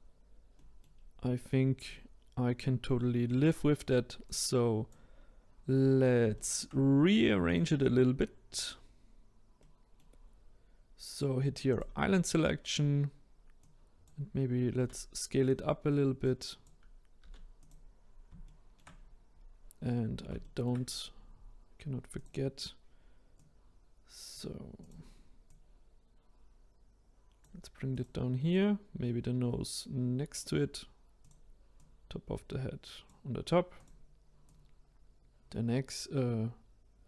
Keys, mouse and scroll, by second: 0.1-0.5 scroll down 1, 0.5 middle click, 0.9 scroll up 3, 1.8-3.5 middle drag, 3.5-4.2 scroll down 1, 4.2-5.7 drag, 5.7 scroll up 2, 6.3-7.4 shift+middle drag, 7.4 click, 9.5-11.7 middle drag, 11.7 click, 12.4-13.5 scroll down 1, 13.5-14.8 drag, 14.8 s, 16.2 click, 17.2 s, 18.4-18.9 shift+middle drag, 18.9-19.9 scroll up 1, 19.9-20.4 scroll down 2, 20.4-22.1 shift+middle drag, 22.1 click, 23.3 click, 24.8 click, 25.4 click, 27.9 click, 28.5-33.7 drag, 33.7 click, 34.4-37.0 drag.